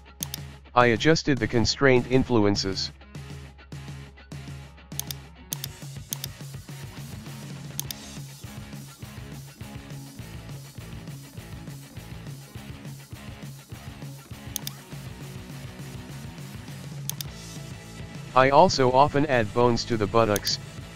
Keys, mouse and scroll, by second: 0.2-1.8 drag, 2.8-3.8 shift+middle drag, 3.8 KP_1, 4.0 scroll down 1, 4.2-5.1 shift+middle drag, 5.6 right click, 6.2-7.6 drag, 8.5 alt+g, 9.4 KP_1, 9.5-10.0 scroll down 1, 10.6-11.6 middle drag, 11.6-12.0 scroll down 1, 12.0-12.4 shift+middle drag, 12.4 scroll down 1, 12.6 shift+middle click, 13.5 scroll up 1, 13.8 middle click, 14.6 click, 14.9-16.6 middle drag, 16.6 Tab, 17.2 right click, 17.4-18.6 middle drag, 18.6 e.